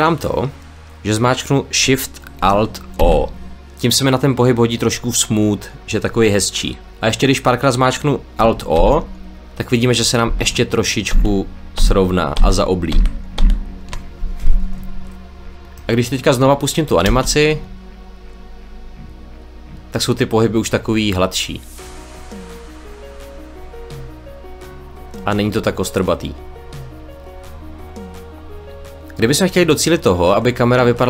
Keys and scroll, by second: 2.9 alt+shift+o, 8.6 alt+o, 16.9 space.